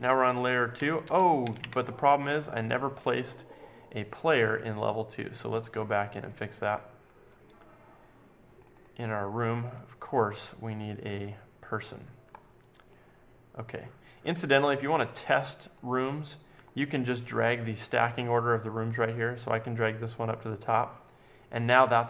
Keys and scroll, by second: 0.0 Up, 0.0 Right, 0.5 Left, 0.7 Down, 1.0 Left, 1.4 Up, 1.6 Right.